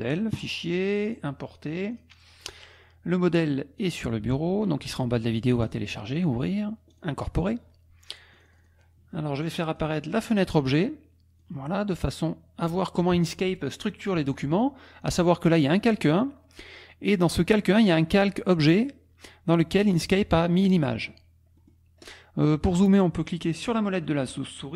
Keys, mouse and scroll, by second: 1.1 click, 1.9 click, 3.8 click, 5.6 click, 6.9 click, 8.3 click, 9.7 click, 10.2 click, 11.4-12.8 drag, 15.6 click, 17.8 click, 21.6 click.